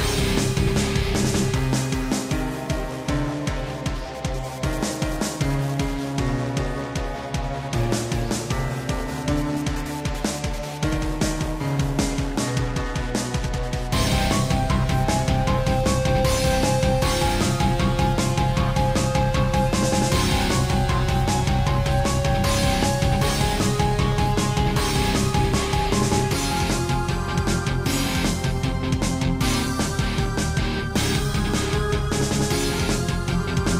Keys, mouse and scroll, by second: 0.6 click, 1.7 scroll up 1, 2.8 click, 4.0 a, 5.1 click, 6.4 click, 7.0 click, 7.5 click, 7.6 double click, 8.2 shift+middle click, 9.4 shift+click, 10.5 i, 11.8 click, 24.3 shift+middle click, 25.6 click, 28.1 i, 30.1 click, 31.0 click, 31.7 i, 33.0 click, 33.5 scroll down 2.